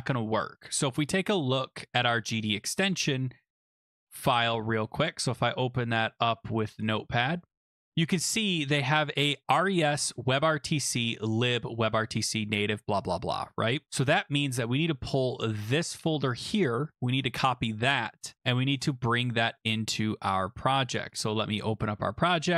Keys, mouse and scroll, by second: 0.7-1.2 scroll, 2.2 click, 5.0 click, 6.8 click, 8.4 click, 13.3 click, 13.9 click, 14.6 click, 15.5 click, 15.9 click, 17.0 ctrl+c, 18.8 click, 19.6 click, 20.9 click, 21.2 click, 21.9 alt+Tab, 22.5 alt+Tab.